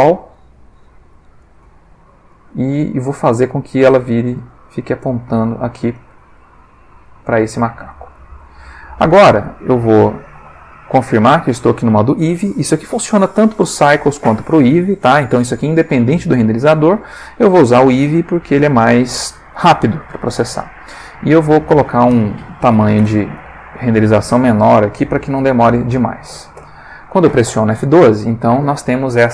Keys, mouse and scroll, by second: 0.8 z, 1.4 click, 1.7 g, 2.3 click, 2.9-3.6 middle drag, 3.8 r, 5.0-6.3 drag, 5.3 middle click, 6.5 r, 7.1 click, 8.1 click, 10.2 click, 20.5 click, 21.5 click, 22.6 3, 22.7 0, 23.0 Return, 26.5 F12.